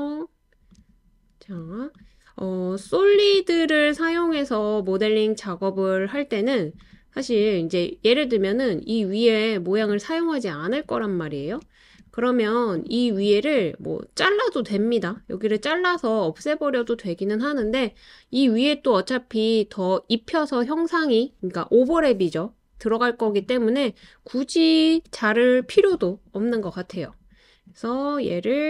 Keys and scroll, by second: 24.9 BackSpace.